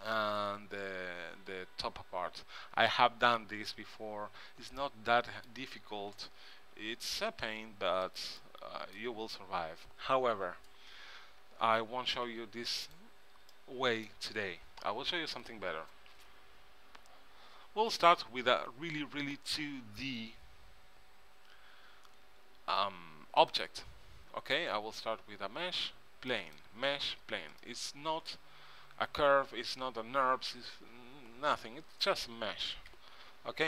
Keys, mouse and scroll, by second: 3.3 Tab, 6.2 g, 8.5-10.4 middle drag, 12.4 x, 13.6-15.5 middle drag, 18.1 KP_1, 18.5 KP_3, 23.5-25.3 drag, 28.0-29.5 middle drag, 33.0 Tab.